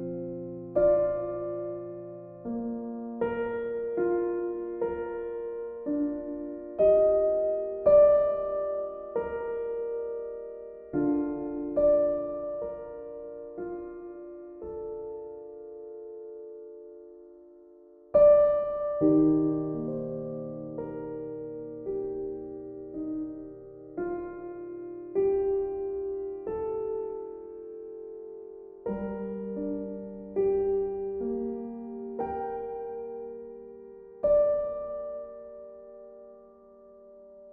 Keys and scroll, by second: 13.3 b, 15.3 x, 20.6 x, 21.3 x.